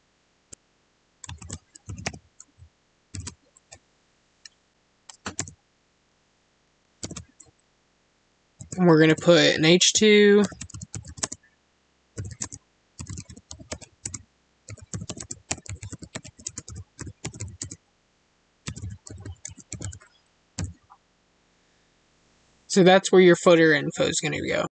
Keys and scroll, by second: 5.3 space, 11.1 space, 12.3 space, 13.9 space, 15.1 space, 16.4 space, 17.5 space, 19.4 space.